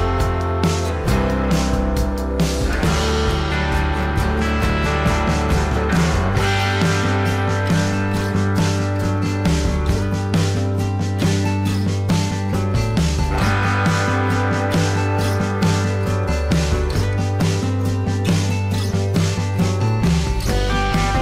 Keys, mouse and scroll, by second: 0.7 alt+scroll down 1, 0.9 space, 4.4 alt+scroll up 1, 5.8 alt+scroll up 1, 6.6 alt+click, 10.4 space, 11.6 ctrl+d, 12.5 space, 14.2 ctrl+d, 15.3 alt+scroll down 1, 15.7 space, 19.0 ctrl+d.